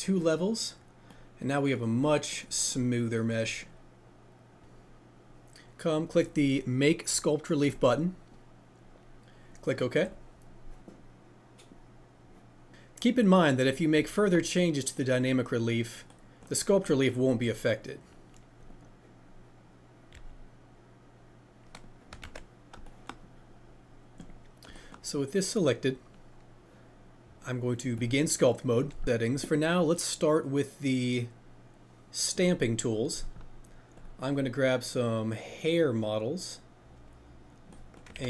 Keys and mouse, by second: 7.6-12.3 drag, 13.1-13.6 drag, 15.6 click, 18.7 click, 22.4 ctrl+z, 32.3 click.